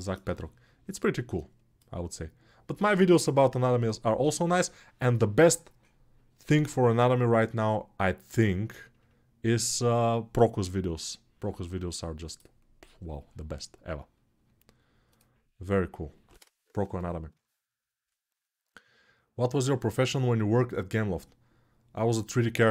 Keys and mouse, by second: 0.0 right click, 0.1-22.7 drag.